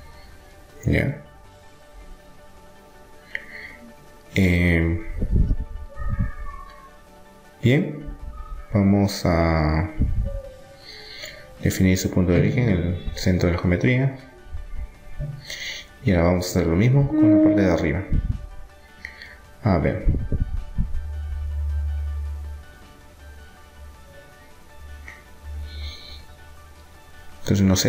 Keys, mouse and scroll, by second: 0.6-2.6 middle drag, 2.7-5.4 middle drag, 3.2 Tab, 7.1 middle click, 9.1-11.7 middle drag, 12.0-14.4 drag, 14.6-16.3 middle drag, 16.3 click, 17.1 right click, 18.0 middle click, 18.8 Tab, 20.7 middle click, 24.0 z, 24.0-26.3 middle drag, 27.0 ctrl+r.